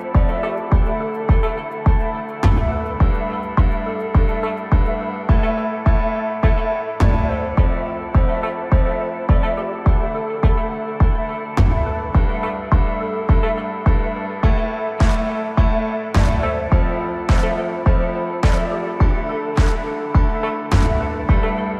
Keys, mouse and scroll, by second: 0.6 scroll up 1, 0.9 Tab, 1.5 scroll up 2, 2.4-2.8 scroll down 2, 2.8-4.3 middle drag, 4.3 3, 4.9 KP_7, 6.0 click, 6.6 middle click, 7.3-7.9 scroll up 1, 7.9 ctrl+KP_Add, 8.2 ctrl+KP_Add, 9.3 KP_1, 10.2-10.8 scroll up 1, 10.8 r, 15.0 scroll up 2, 15.3 click, 15.8 scroll down 1, 16.0-18.3 middle drag, 18.3 KP_1, 19.4 scroll up 1, 19.8 Tab, 21.3-21.6 scroll up 2, 21.6 Tab.